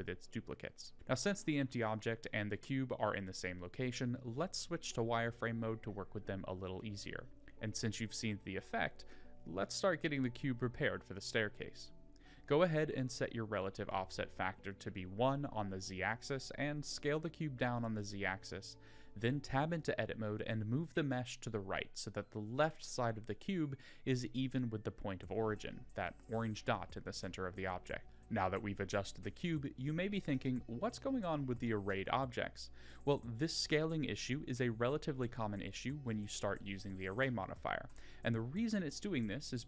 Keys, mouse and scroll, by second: 0.7 click, 1.0 click, 1.7 r, 7.7 middle drag, 9.0 click, 10.4 click, 12.7-14.3 drag, 14.6-15.2 middle drag, 17.4 s, 23.7 Tab, 24.5 a, 25.2 KP_1, 26.0 g, 28.0 Tab, 28.6 click, 29.0 scroll down 2, 29.4-29.9 middle drag, 30.7-31.7 middle drag, 33.9-35.0 middle drag, 35.0-35.6 scroll down 2, 35.7 shift+middle click, 36.2-36.6 middle drag, 37.4-37.9 middle drag.